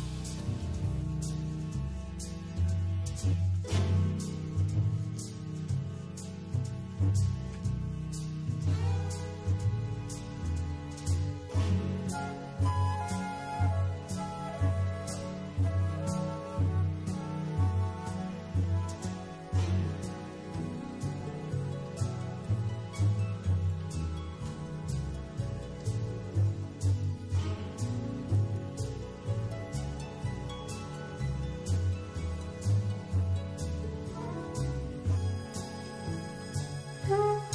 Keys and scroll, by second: 1.9 0, 9.6 6, 11.4 5, 16.8 shift+super+9, 24.5 0, 30.2 2, 31.2 super+z, 36.3 super+space.